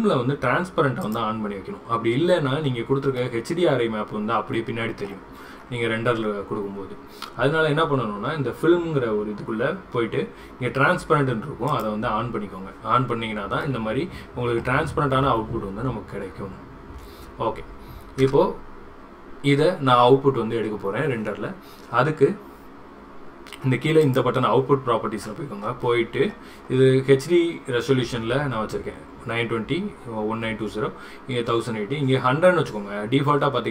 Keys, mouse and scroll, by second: 1.1 click, 3.3-5.2 middle drag, 11.8 click, 13.8-14.7 middle drag, 18.2 KP_0, 24.1 click.